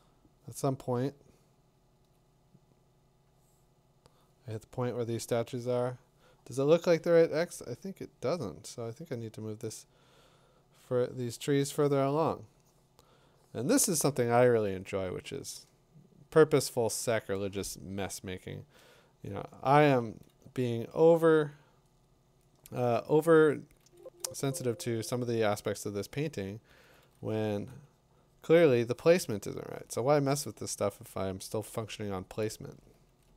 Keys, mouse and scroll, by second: 2.1 click, 17.1 click, 18.2 2, 18.3 4, 18.5 8, 19.7 middle click, 23.8 [, 24.0 [, 24.3 [, 26.8-27.5 typing, 32.5 click, 33.0 [, 33.3 [.